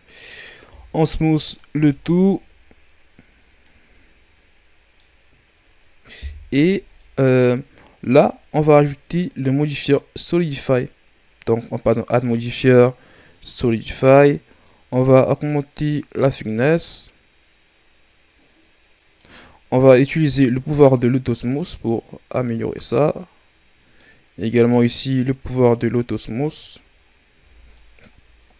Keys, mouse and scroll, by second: 0.6 w, 1.8 a, 2.0 scroll down 3, 2.3-5.3 middle drag, 7.0 middle click, 7.4-8.0 scroll up 3, 8.0 right click, 8.9 scroll up 3, 10.1-14.4 drag, 14.6-15.9 middle drag, 15.9-19.0 drag, 20.2-22.3 drag, 22.3 scroll down 2, 22.6-24.1 middle drag, 24.1 scroll up 2, 24.7-26.3 right drag, 26.3 click, 27.1 scroll down 2, 27.3 a, 27.7 middle click.